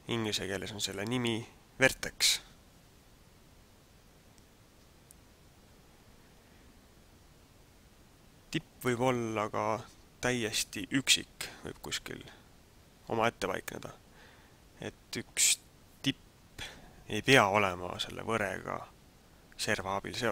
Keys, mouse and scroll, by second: 7.7-8.4 scroll up 1.